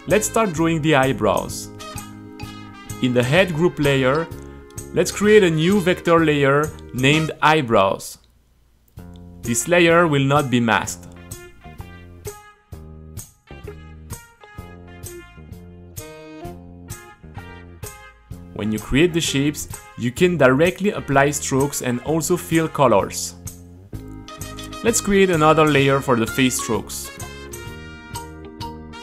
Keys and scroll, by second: 1.2-9.5 typing, 2.5 Caps_Lock, 11.6-15.0 typing, 14.1 Return, 16.5 u, 17.1 super+a, 18.0 space, 18.6 q, 22.7-23.8 typing, 26.8 u, 27.7 space, 27.8 Return, 28.0 g, 28.5 c.